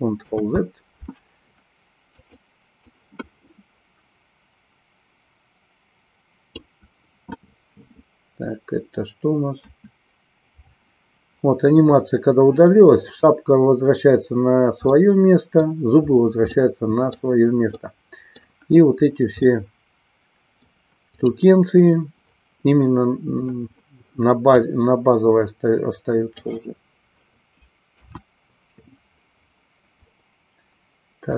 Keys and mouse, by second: 0.4 ctrl+z, 2.0 click, 2.8-6.5 drag, 9.6 Delete, 14.9 middle click, 16.6 middle click, 17.8 middle click, 19.5-20.7 middle drag, 21.0 click, 24.7-26.5 drag, 28.0 KP_1.